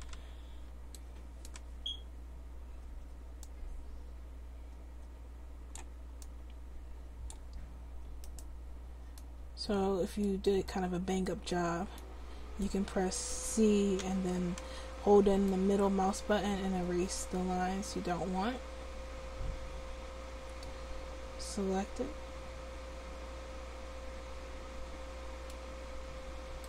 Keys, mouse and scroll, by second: 9.2 click, 14.0 c.